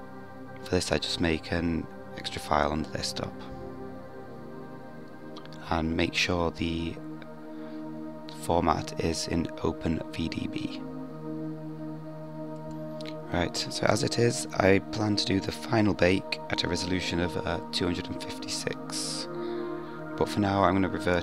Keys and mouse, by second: 13.4-21.2 drag.